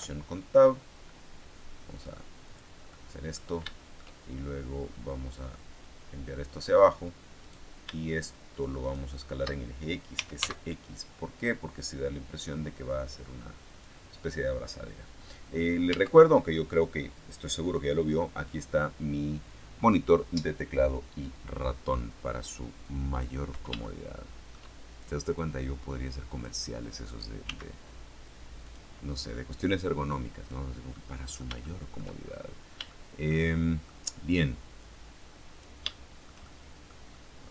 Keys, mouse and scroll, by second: 1.0-1.7 scroll up 2, 1.8 click, 2.4 click, 2.8 middle click, 3.6 shift+middle click, 5.5-6.8 drag, 7.4 right click, 9.0 shift+right click, 9.8-10.8 typing, 13.6 click, 15.8 Tab, 22.8 click, 23.7-24.7 shift+middle drag, 25.2-26.5 drag, 27.4 s, 28.6 click, 29.4-30.6 drag, 30.8-32.0 middle drag, 32.0-32.8 shift+scroll up 2, 32.8 shift+middle click, 33.7 shift+middle click, 34.7-35.7 drag, 35.8-37.5 shift+middle drag.